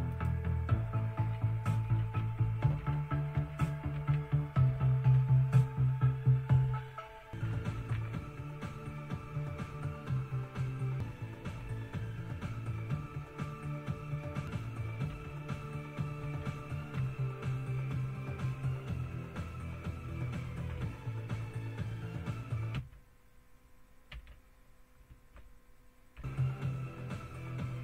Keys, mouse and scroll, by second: 0.2 click, 1.5-4.7 typing, 5.2 Return, 7.3 Down, 7.6 Down, 7.8 Down, 8.0 Down, 11.7 F5, 15.1 F6, 16.3 Down, 17.0 Return, 18.9 Left, 20.4 Right, 20.8 Left, 22.8 m, 24.1 m, 25.1 Right, 26.2 m.